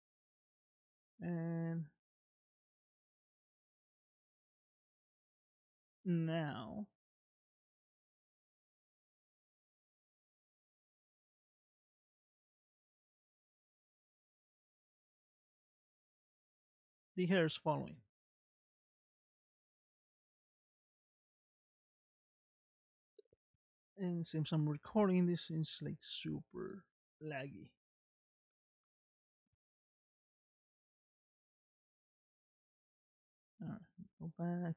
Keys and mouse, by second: 1.3 click, 2.2 space, 12.4-14.5 middle drag, 27.2-28.9 middle drag, 33.4 space, 34.5 click.